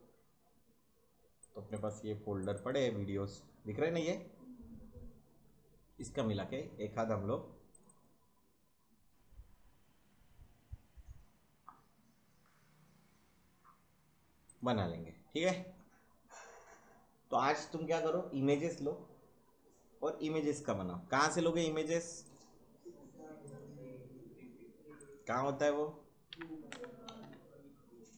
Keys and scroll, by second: 26.0-27.5 typing.